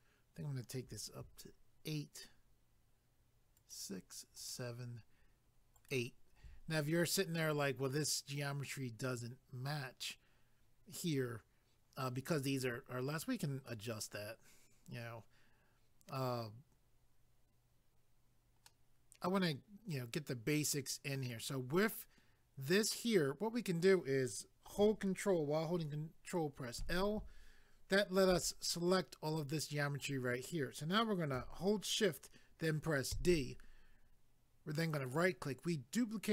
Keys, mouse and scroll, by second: 3.6 ctrl+right click, 18.7 middle click, 26.8 ctrl+i, 35.0 right click.